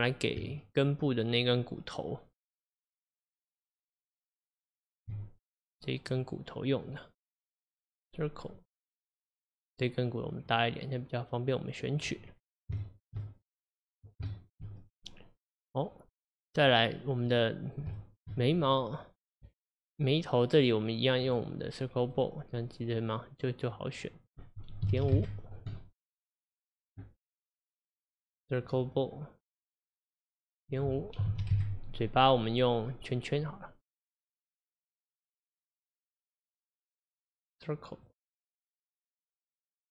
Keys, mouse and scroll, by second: 0.4 Tab, 5.6 click, 6.1 click, 7.7 click, 10.5-12.3 drag, 12.3-12.8 scroll down 1, 12.8-16.6 shift+middle drag, 16.6-17.3 scroll up 2, 17.3-18.6 middle drag, 18.6 click, 21.2 click, 24.3-27.3 drag, 27.5 click, 28.7 click, 30.7-33.7 drag, 35.7 click, 37.1 click, 38.9-39.9 middle drag.